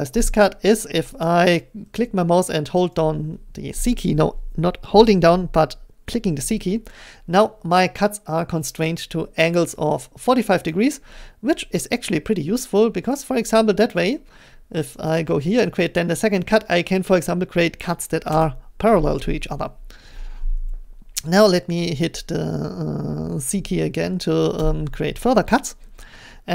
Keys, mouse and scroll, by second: 1.2-4.6 drag, 6.1 c, 10.7 click, 13.2 click, 15.1 click, 18.4 click, 24.6 c.